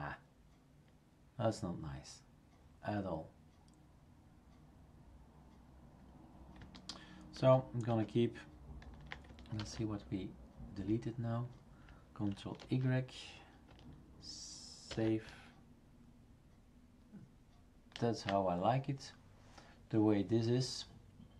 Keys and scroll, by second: 7.4 ctrl+z, 7.9 ctrl+z, 9.6 ctrl+s, 12.6 ctrl+y, 14.9 ctrl+s.